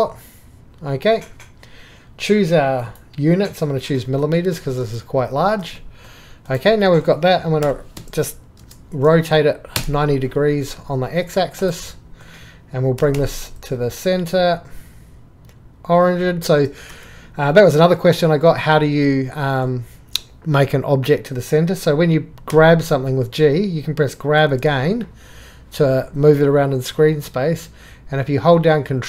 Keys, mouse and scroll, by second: 0.0 drag, 7.6 r, 8.0 x, 8.3 KP_5, 8.6 KP_0, 9.7 Return, 10.8 middle click, 13.0 g, 16.9 Escape, 22.6 g.